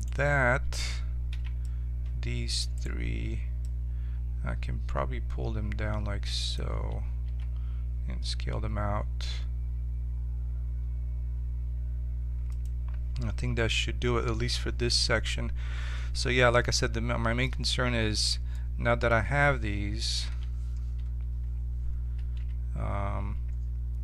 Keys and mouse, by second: 1.3 c, 2.8-4.6 right drag, 3.6-5.8 drag, 7.2 s, 16.6-20.2 middle drag, 20.2 l, 22.3 z.